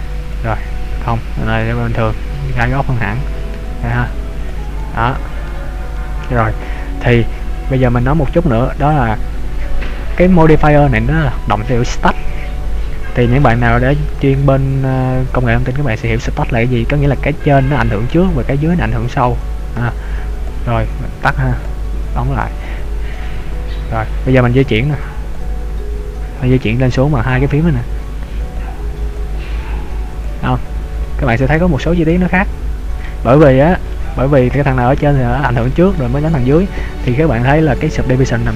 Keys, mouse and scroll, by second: 0.3 click, 1.7 middle click, 3.8 click, 4.8 click, 5.1 middle click, 6.2 middle click, 20.4 click, 21.7 click, 22.6 click, 23.2 click, 24.6 click, 28.8 click, 29.6 click, 30.3 click, 32.2 middle click, 33.3 scroll up 2, 34.2-34.6 scroll up 1, 34.6 middle click, 36.1 shift+middle click.